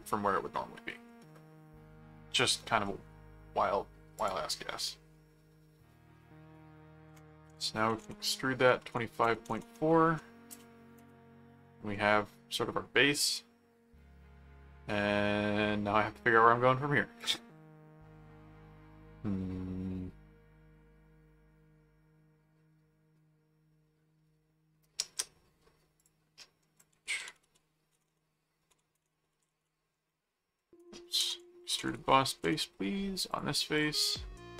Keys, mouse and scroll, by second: 2.8 middle click, 4.2 click, 7.9-10.7 typing, 11.9-16.7 middle drag, 17.2 click, 17.5-25.4 middle drag, 26.0 click, 26.4 middle click, 26.7-32.4 typing, 26.8 click, 33.3 click.